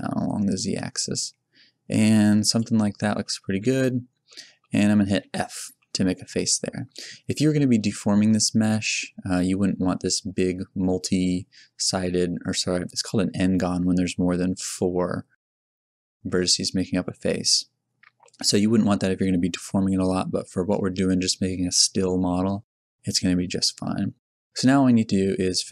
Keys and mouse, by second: 3.4 middle click, 3.8 z, 5.7 f.